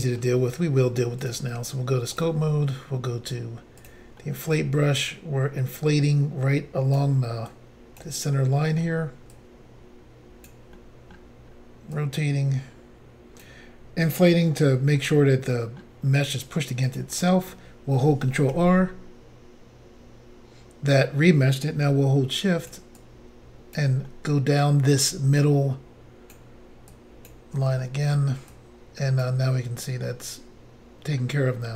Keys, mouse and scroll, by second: 1.2 click, 2.2 click, 3.8 click, 3.9 click, 4.2 middle click, 5.0 click, 7.5 click, 8.3 middle click, 9.3 click, 10.8 middle click, 11.5 scroll down 1, 12.0 click, 14.6 scroll down 2, 15.0 middle click, 16.9 click, 17.1 click, 18.5 ctrl+r, 22.4 shift+click, 23.0 shift+click, 24.1 middle click, 25.5 shift+click, 27.0 shift+click, 27.9 shift+middle click, 28.5 shift+click, 29.7-30.1 scroll down 3, 30.1 middle click.